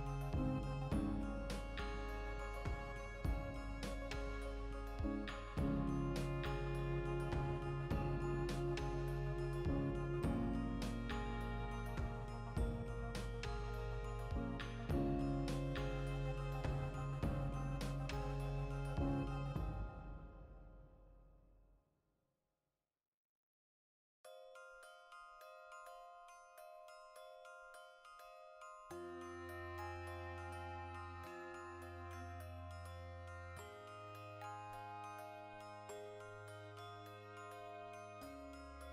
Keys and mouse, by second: 0.6 click, 1.0 right click, 1.2 l, 2.8 click, 3.4 s, 5.4 click, 5.9 z, 6.8-9.0 shift+middle drag, 7.1 z, 9.0 Tab, 9.5 ctrl+2, 10.3 Tab, 10.5 shift+middle click, 10.8 alt+right click, 11.3-14.3 drag, 14.3 2, 14.4 middle click, 15.4 alt+shift+right click, 15.8 ctrl+b, 18.3 click, 18.4-22.0 middle drag, 19.0 ctrl+r, 19.5 right click, 19.7 ctrl+b, 22.0 click, 22.0 right click, 22.2-25.9 middle drag, 23.7 ctrl+r, 24.1 right click, 24.8 ctrl+b, 25.3 right click, 25.9 ctrl+r, 26.6 click, 26.8 ctrl+r, 27.5 click, 27.6-28.8 middle drag, 27.8 ctrl+r, 28.8 click, 29.1 shift+middle click, 29.4 3, 29.5 right click, 29.7-31.1 ctrl+middle drag, 30.7 i, 31.1 click, 31.3 x, 32.0 2, 32.3 alt+right click, 32.5-34.5 ctrl+middle drag, 33.5 ctrl+f, 34.5 F9, 35.2-37.3 drag, 37.3-38.9 middle drag.